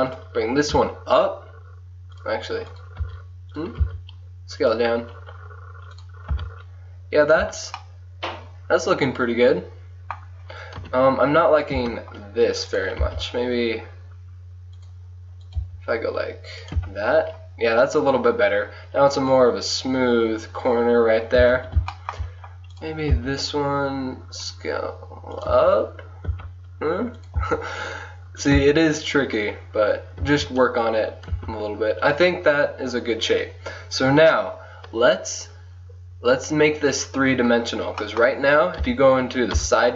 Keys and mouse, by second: 0.4-1.8 drag, 0.8 g, 2.8 click, 3.1 g, 3.9 s, 4.5 click, 6.0 click, 6.5 g, 7.4 Tab, 10.7-11.8 middle drag, 10.9 KP_1, 11.8 Tab, 12.7-14.6 drag, 13.1 s, 15.5-16.8 right drag, 15.7 g, 16.8 Tab, 21.5 Tab, 22.1 click, 22.8 right click, 23.2 s, 25.6 Tab, 26.4 Tab, 27.4 g, 28.6 Tab, 30.3 Tab, 31.4 Tab, 39.6 KP_3.